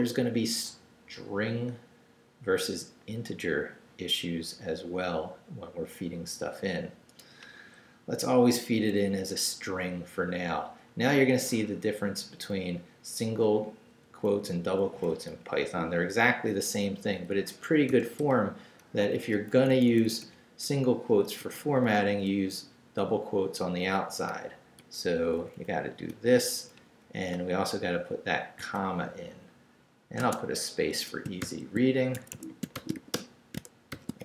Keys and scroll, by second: 10.2 Right, 13.5 Left, 14.1 Right, 16.5 Left, 17.9 i, 18.2 BackSpace, 18.9 shift+BackSpace, 19.1 shift+', 19.5 shift+Right, 20.6 BackSpace, 21.2 shift+BackSpace, 21.4 shift+', 21.9 shift+Left, 24.8 typing, 25.2 Right, 26.0 typing, 26.5 Right, 27.0 Left, 28.6 typing, 30.2 space, 30.9 ⟲, 31.4 shift+l, 32.1 shift+Escape, 32.5-33.9 typing.